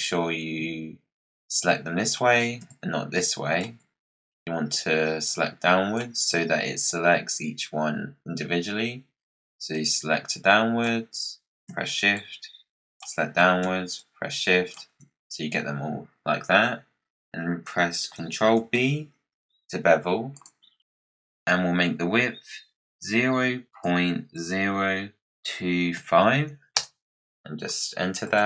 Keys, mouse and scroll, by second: 1.5 shift+click, 2.6 shift+click, 5.2 click, 9.6 click, 12.0 shift+click, 13.9 shift+click, 18.5 ctrl+b, 28.1 click.